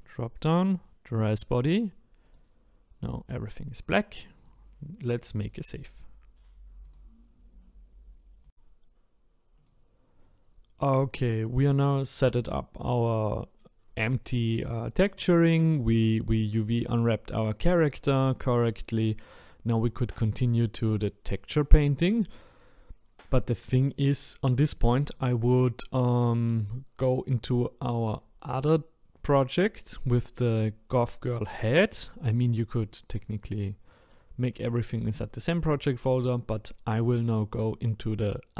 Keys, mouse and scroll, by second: 3.2 click, 9.8-13.0 drag, 15.1 middle click, 15.9-16.3 scroll down 2, 16.4-20.4 middle drag, 20.4 click, 23.6 middle click, 24.2-24.8 scroll up 1, 24.8 shift+middle click, 25.4-25.7 scroll up 2, 27.2 click.